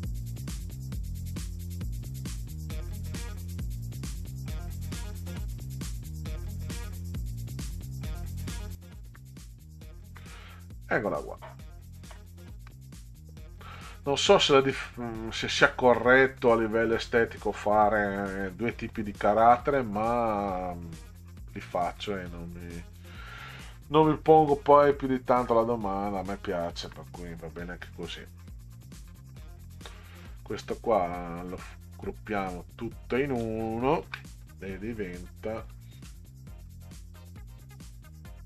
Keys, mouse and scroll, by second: 0.1 middle click, 0.4 middle click, 1.5 middle click, 2.1 ctrl+scroll up 2, 2.3 middle click, 2.7 click, 3.6 click, 4.3 click, 5.3 click, 5.6 click, 6.5 middle click, 6.9 middle click, 7.3 middle click, 8.7 alt+Up, 12.2-12.7 ctrl+scroll down 2, 16.4-16.8 middle drag, 18.5 middle click, 21.7-22.8 drag, 24.4 Right, 24.6 Right, 25.4 Right, 26.9 Right, 28.2 click, 29.1-30.3 drag, 35.7-36.2 scroll up 4, 36.6-37.3 scroll up 2.